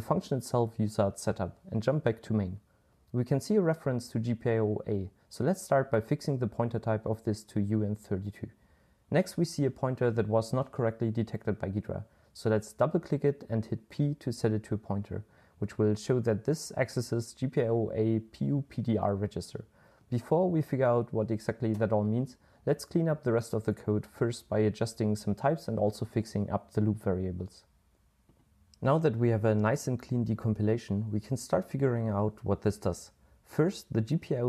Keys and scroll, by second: 0.0-2.5 typing, 6.0 super+l, 6.3-6.8 typing, 7.2 Return, 11.5 p, 16.4 super+l, 17.1-18.2 typing, 20.2 super+l, 20.3 typing, 25.2-28.0 typing, 32.8-34.4 typing.